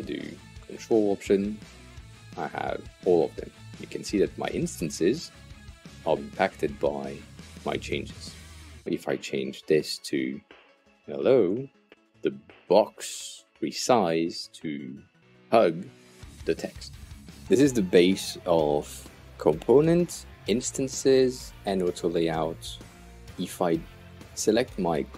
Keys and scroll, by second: 8.8 Return, 9.7-11.9 typing.